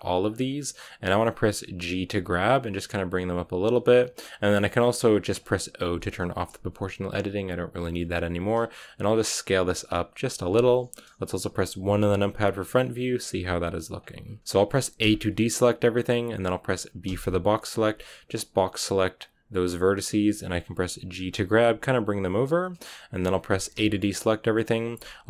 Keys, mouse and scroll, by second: 0.2 b, 0.4-1.8 scroll down 1, 1.8 g, 5.8 o, 7.8-8.3 scroll up 1, 8.3 s, 9.9 g, 10.1 s, 11.7 KP_1, 13.2 g, 14.4-14.9 scroll down 1, 14.9 a, 15.9-19.1 scroll up 1, 19.1 b, 21.1 g, 23.6 a.